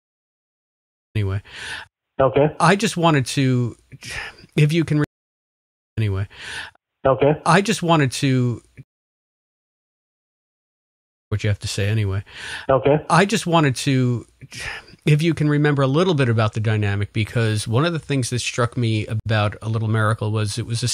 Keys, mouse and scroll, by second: 1.0 click, 1.1 space, 3.1-4.8 drag, 5.0 space, 5.3 click, 5.8 click, 5.9 space, 8.2 click, 8.7 space, 9.4-10.6 drag, 11.1 click, 11.2 space, 14.1 click, 14.6 click, 15.5 click, 16.4 ctrl+s, 17.5-19.0 drag, 19.1 Delete, 20.1 click, 20.8 click.